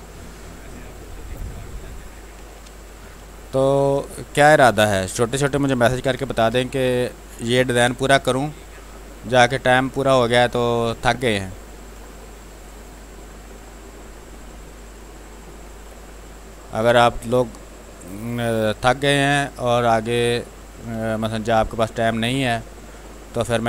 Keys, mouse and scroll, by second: 1.0 click, 1.4 space, 1.7 click, 1.9 space, 2.3 ctrl+d, 2.8 click, 4.7 r, 4.9 click, 5.8 b, 6.1 space, 6.7 ctrl+click, 7.5 b, 7.8 space, 8.1 ctrl+click, 9.2-10.9 drag, 10.9 ctrl+z, 11.4-13.3 drag, 13.3-14.8 drag, 14.8 click, 15.8 space, 16.0 alt+click, 19.4 click, 20.3 click, 20.9 space, 21.1 alt+click, 23.3 ctrl+click.